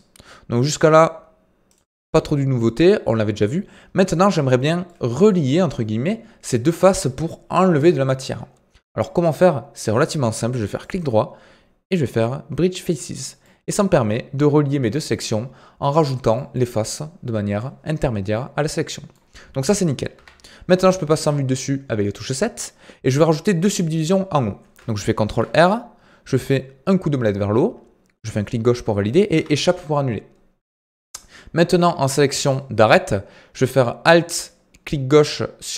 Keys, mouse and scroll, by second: 2.0-10.8 middle drag, 10.8-13.4 right drag, 13.4-20.1 middle drag, 20.1 KP_7, 25.2 ctrl+r, 32.4 click, 34.0 alt+click.